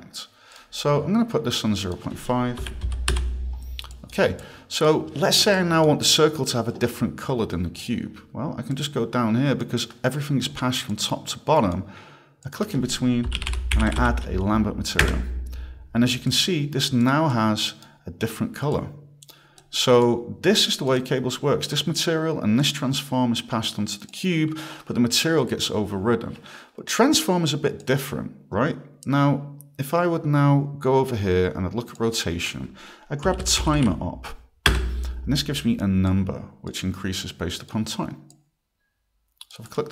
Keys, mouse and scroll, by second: 0.5 click, 1.8 click, 2.4-3.6 typing, 3.9 click, 4.4 click, 5.5 click, 7.8 click, 8.7 click, 10.9 click, 12.5 click, 13.0-14.5 typing, 15.0 Return, 16.3 click, 17.1 click, 19.6 click, 20.0 click, 20.9 click, 21.7 click, 22.6 click, 24.1 click, 25.2 click, 27.8 click, 32.0 click, 33.0-34.3 typing, 34.7 Return, 36.1 click, 37.2 click, 38.3 click, 39.7 click.